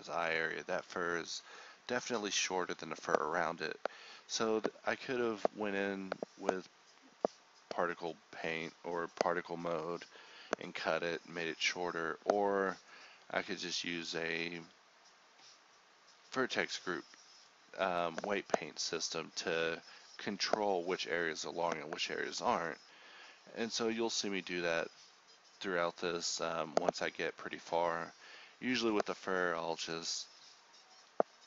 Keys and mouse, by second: 1.6-2.9 drag, 3.9 h, 4.6-6.4 drag, 6.4 z, 7.0 click, 7.1 h, 7.4 click, 7.9 h, 8.5 h, 10.6 shift+right click, 11.2 click, 11.6 h, 12.3-13.4 drag, 13.4 z, 14.2 z, 14.8-16.8 drag, 16.8 alt+h, 17.6 ctrl+z, 19.2 alt+h, 19.2 click, 20.9 shift+click, 22.2 ctrl+z, 24.2 z, 24.7 c, 26.7 z, 28.2 middle click, 29.5 ctrl+g, 30.4 Tab, 30.9 click.